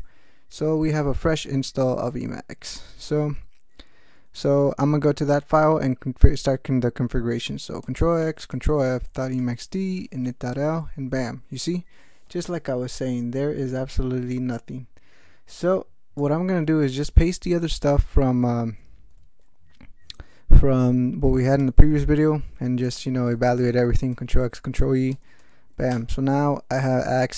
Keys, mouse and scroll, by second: 2.1 click, 8.2 ctrl+x, 8.5 ctrl+f, 9.1 ctrl+., 9.1 ctrl+e, 9.2 ctrl+m, 9.4 ctrl+Tab, 9.7-10.6 typing, 14.3-16.4 drag, 16.8 alt+w, 17.7 click, 21.6 ctrl+y, 22.1 ctrl+p, 22.8 ctrl+x, 23.1 ctrl+e, 23.3 ctrl+n, 23.5 ctrl+e, 23.8 ctrl+x, 24.1 ctrl+e, 24.4 ctrl+n, 24.6 ctrl+e, 25.1 ctrl+x, 25.4 ctrl+e.